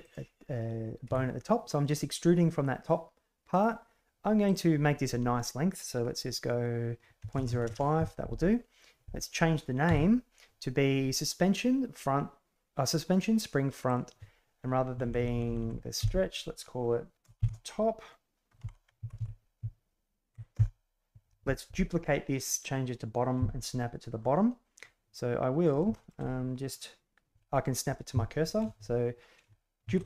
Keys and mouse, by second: 0.0 click, 1.0 e, 4.5-8.3 drag, 15.0 Delete, 19.1 Right, 24.1-24.7 middle drag, 25.6 right click, 25.9 shift+middle drag, 29.8 shift+d.